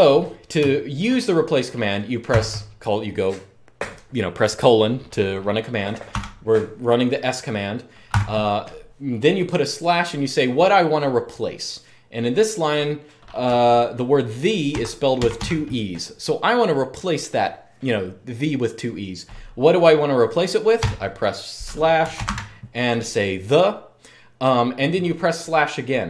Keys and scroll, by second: 2.0 shift+;, 5.8 typing, 7.8 typing, 13.2 typing, 14.2-15.6 typing, 20.5-22.5 typing.